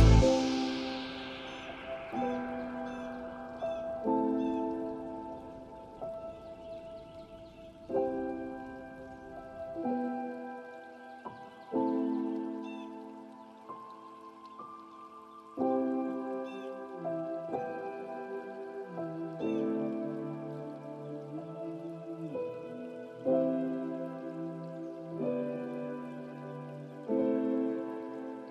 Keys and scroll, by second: 1.7 ctrl+space.